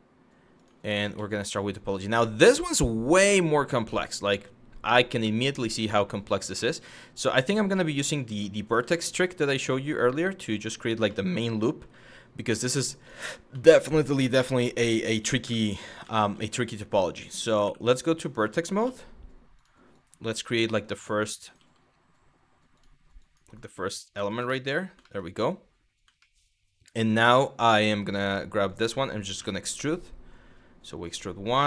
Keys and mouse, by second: 0.2 click, 0.7 g, 2.3 shift+middle drag, 4.9 shift+middle drag, 6.2 shift+middle click, 7.3 click, 7.9 g, 10.1 click, 10.7 middle drag, 11.4 g, 12.6 click, 13.2 middle click, 13.9 Tab, 15.1 1, 15.7 z, 17.7 click, 18.5 g, 19.2 click, 19.7 click, 19.8 g, 20.5 click, 21.1 click, 21.2 g, 22.4 click, 22.8 click, 23.7 click, 24.2 shift+middle click, 24.7 shift+middle click, 25.9 shift+middle click, 28.3 click, 29.0 e, 30.7 click, 31.2 e.